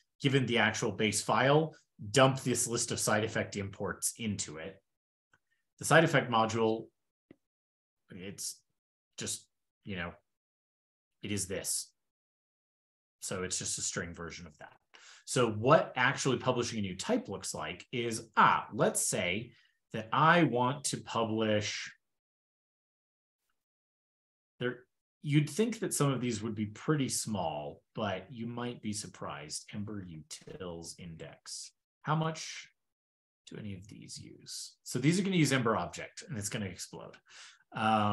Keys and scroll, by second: 10.9 shift+super+], 14.0 shift+super+[, 27.3 super+p, 37.7 super+w.